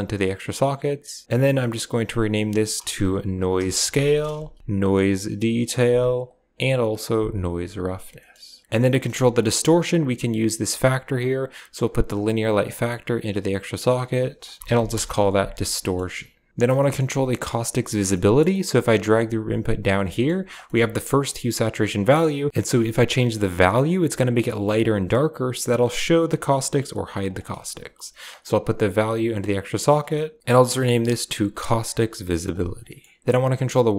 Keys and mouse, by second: 1.2-4.6 drag, 4.8 click, 4.9-6.0 drag, 6.1-7.3 drag, 8.8 middle click, 9.6-11.1 drag, 12.0-13.1 drag, 13.8 click, 13.9 click, 15.7 middle click, 16.7 middle drag, 17.4 click, 18.0 middle click, 18.9 g, 20.0 middle click, 20.5 middle drag, 21.1 click, 22.5-27.2 shift+drag, 28.2-29.3 drag, 30.4 click, 30.7 click, 30.9-32.4 drag, 32.8 middle click.